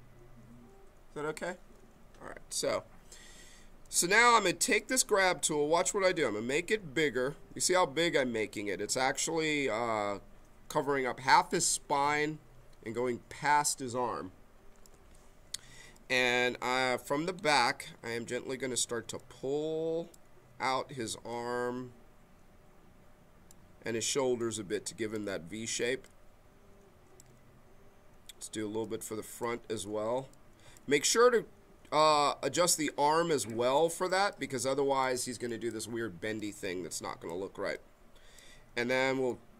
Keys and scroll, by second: 6.2 b.